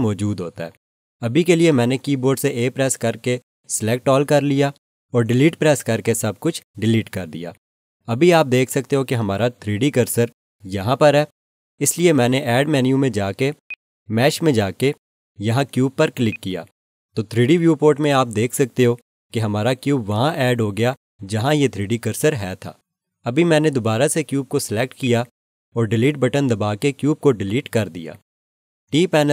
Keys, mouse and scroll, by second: 2.8 a, 5.8 Delete, 13.6 click, 25.0 click, 26.5 Delete.